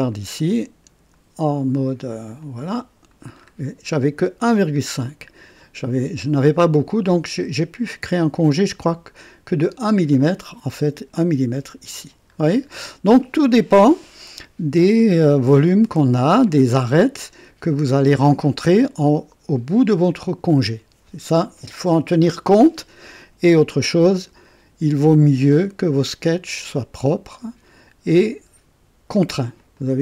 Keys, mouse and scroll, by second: 0.4-1.2 right drag, 2.4 click, 3.4 scroll up 2, 9.6 click, 12.3-12.7 scroll down 1, 29.5 click.